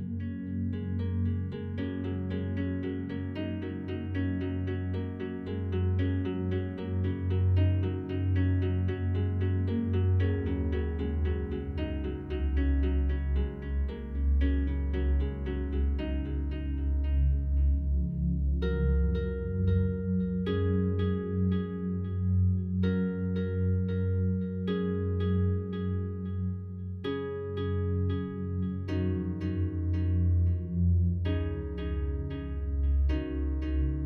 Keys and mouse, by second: 0.2 click, 0.4 click, 0.9 click, 1.5 click, 2.5 click, 3.8 click, 6.5 click, 7.9 click, 8.4 alt+click, 9.2 click, 10.2 click, 12.0 click, 12.5 click, 14.3 click, 15.4-16.2 ctrl+alt+drag, 17.4 click, 18.3-21.8 shift+drag, 22.5 ctrl+alt+click, 23.0 ctrl+alt+click, 23.5-24.2 alt+drag, 25.0 ctrl+alt+click, 25.6 alt+shift+click, 26.2 click, 26.8 click, 27.2 drag, 27.6 click, 28.1 click, 29.2 click, 29.8 shift+d, 30.4 shift+click, 30.8 click, 31.7 click, 32.2-32.7 alt+shift+drag, 33.7-34.0 drag.